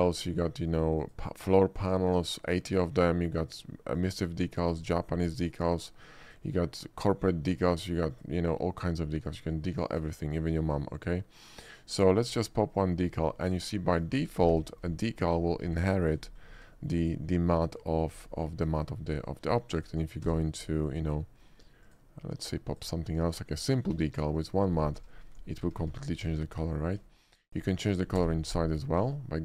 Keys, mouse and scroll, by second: 1.0 click, 4.0 click, 4.9 click, 6.3 click, 8.2 click, 9.9 click, 12.3 click, 12.7 click, 13.2 scroll up 1, 13.5 middle click, 13.9 shift+middle drag, 14.7 g, 15.3 click, 15.7 s, 16.1 click, 16.8 shift+middle click, 17.1 shift+middle click, 17.4-18.0 shift+middle drag, 18.1 shift+middle drag, 19.0 shift+middle click, 19.3 shift+middle click, 19.6 shift+middle drag, 19.8 shift+click, 20.3 d, 21.9 click, 22.8 click, 23.3 middle click, 24.0 s, 24.4 click, 25.0 g, 25.6 click, 26.0 shift+middle drag, 26.3 middle click, 26.6-27.0 middle drag, 27.1 shift+middle drag, 27.5 shift+click, 28.3 d, 29.1 click.